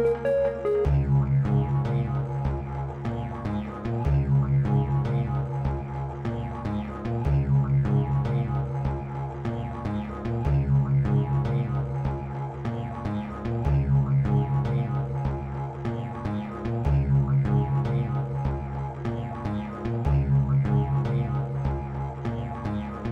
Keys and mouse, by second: 16.4 click.